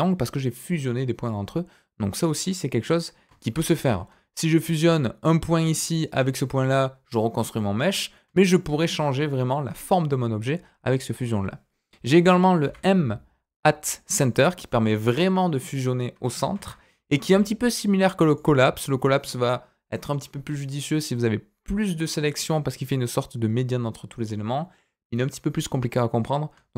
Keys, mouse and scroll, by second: 3.8 ctrl+z, 4.6 click, 5.9 shift+click, 7.8 click, 8.4 shift+click, 11.4 click, 12.6 m, 16.5 ctrl+z, 17.3 m.